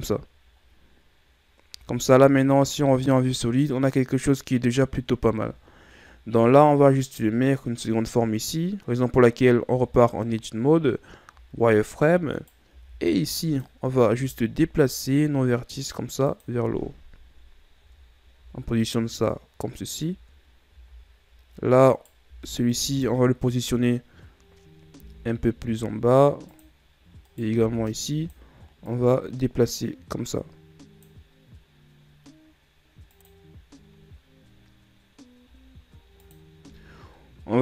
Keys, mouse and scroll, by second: 1.8 Tab, 2.3 z, 5.6-6.7 scroll up 5, 6.7 scroll up 2, 9.6 Tab, 11.4 z, 12.3 right click, 12.7 b, 17.8 Tab, 18.4 a, 20.1 Tab, 20.7 z, 21.9 right click, 22.2 b, 27.3 right click, 27.6 b, 28.8-31.9 drag, 36.2 click.